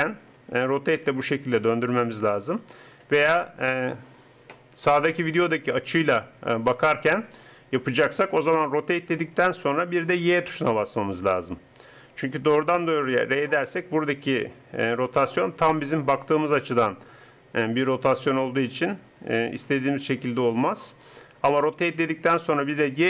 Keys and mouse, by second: 0.4 r, 3.0 KP_0, 8.7 r, 13.1 r, 21.6 r.